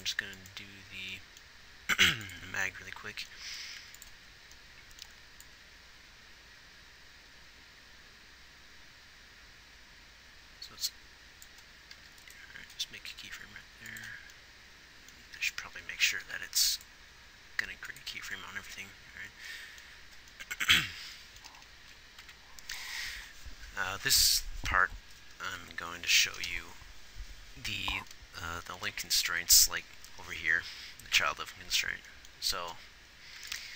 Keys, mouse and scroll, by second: 4.1 ctrl+s, 22.7 Right, 25.9 ctrl+s.